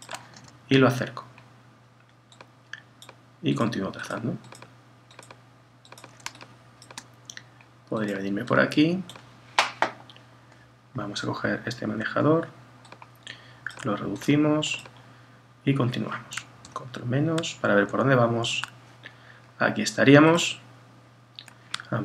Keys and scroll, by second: 16.6 super+-.